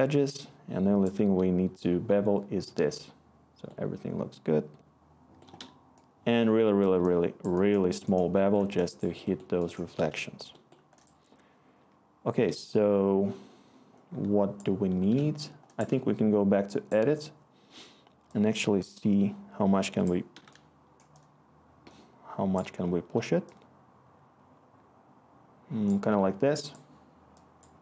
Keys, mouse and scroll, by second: 7.5-9.2 click, 7.6 click, 9.4-12.4 scroll, 12.9-13.3 scroll.